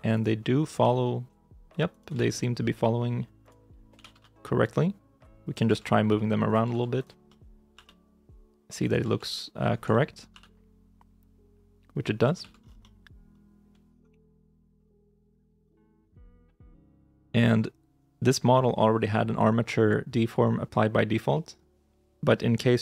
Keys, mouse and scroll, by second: 0.0 right click, 0.3 middle click, 0.7 g, 2.0 ctrl+z, 2.2 middle click, 3.8 g, 4.0 y, 5.9 ctrl+z, 5.9 g, 6.6 ctrl+z, 7.1 middle click, 7.6 r, 8.9 ctrl+z, 9.2 middle click, 9.5 scroll up 1, 9.8 shift+middle click, 10.2 r, 12.3 ctrl+z, 12.4 scroll down 1, 12.7 middle click, 13.9 ctrl+-, 14.9 right click.